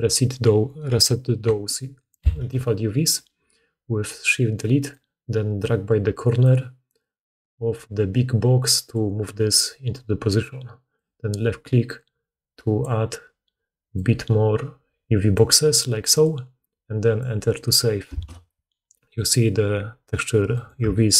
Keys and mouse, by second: 2.2 shift+Delete, 6.3-21.1 drag.